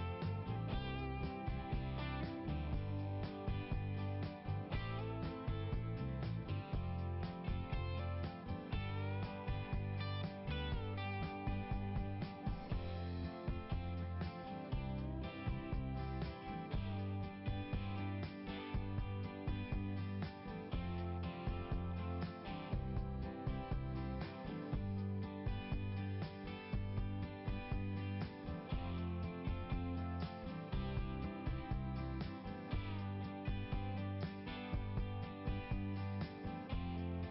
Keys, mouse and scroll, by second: 0.6 click, 7.9 click, 8.8 click, 14.0 click, 15.9 click, 18.8 click, 20.6 click, 22.3 click, 25.0 click, 33.9 right click, 36.3 click.